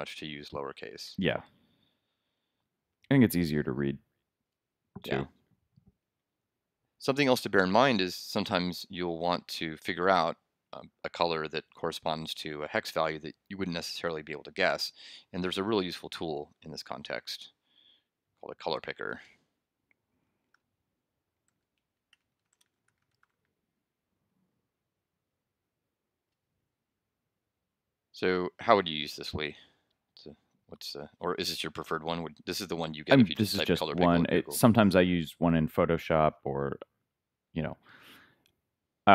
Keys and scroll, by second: 0.8 super+s, 20.2 super+l, 21.4 super+f, 21.9 super+c.